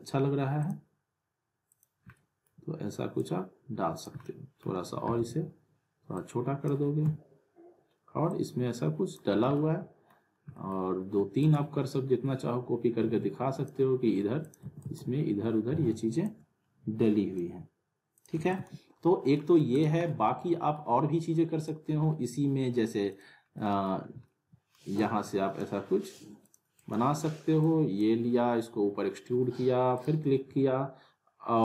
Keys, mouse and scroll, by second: 0.6 click, 2.1 alt+middle click, 3.2-4.1 click, 4.2-4.9 alt+middle click, 5.1 r, 6.2-6.8 click, 7.0 w, 8.3-9.2 click, 9.3 scroll down 1, 9.6-10.2 alt+middle click, 10.3 scroll down 1, 10.6 middle click, 11.4-13.9 shift+click, 14.4 click, 14.6 alt+w, 14.8 alt+right click, 16.2-17.5 drag, 18.3 alt+w, 18.5 alt+right click, 18.5 alt+right click, 18.6 alt+w, 19.2 scroll down 1, 19.3 middle click, 19.7 click, 20.0-21.0 alt+middle drag, 21.6 click, 23.6 middle click, 24.1 scroll down 1, 24.2-24.9 middle click, 25.0-25.6 drag, 26.7 right click, 27.9 drag.